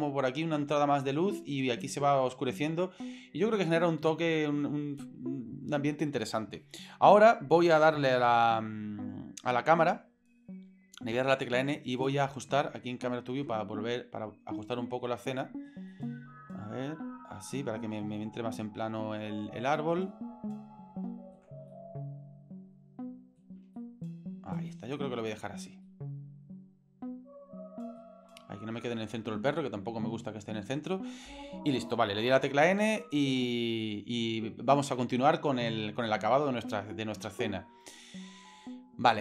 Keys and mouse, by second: 11.1 n, 11.9 click, 13.4 n, 14.0-15.7 middle drag, 15.9 shift+middle click, 16.3 shift+click, 16.5 shift+middle click, 18.0-19.5 shift+middle drag, 20.2-21.4 ctrl+middle drag, 21.7-23.4 middle drag, 23.7-24.7 shift+middle drag, 24.9 middle click, 25.9-26.6 shift+middle drag, 26.6 shift+click, 26.9-28.0 shift+middle drag, 32.4 n, 33.0 click, 33.3 n.